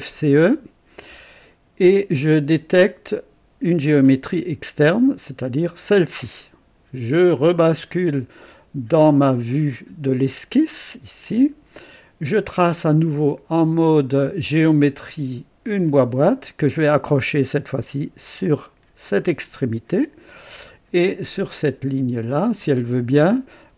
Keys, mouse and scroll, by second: 3.7 click, 5.6 click, 10.1 click, 14.5 click, 15.8 click, 19.0 click.